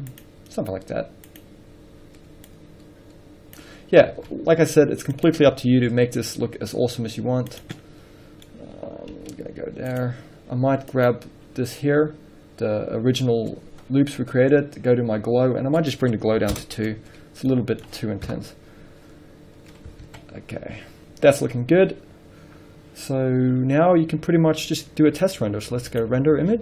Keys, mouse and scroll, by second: 0.5 click, 4.3 scroll up 1, 4.5 alt+a, 5.9 click, 6.2 shift+d, 7.9 click, 8.1 middle drag, 8.8-9.8 middle drag, 9.5 g, 10.4 click, 10.5 scroll down 1, 11.5 click, 16.9 click, 17.0 Return, 17.8 middle click, 18.6 KP_0, 20.5 alt+a, 20.9-21.6 scroll down 1, 21.6 scroll up 1.